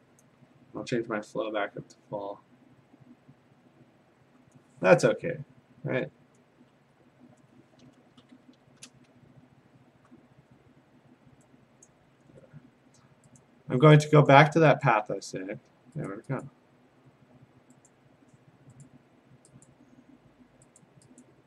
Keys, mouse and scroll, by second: 1.3 ), 2.2 click, 4.4 click, 6.7 ctrl+z, 8.4-9.8 typing, 11.9 click, 12.3 ctrl+z, 13.4 click, 14.0 click, 14.3 click, 14.9 click, 15.5 a, 16.1 click, 16.5 click, 17.9 click, 18.9 click, 20.1 click, 20.8 click, 21.2 click.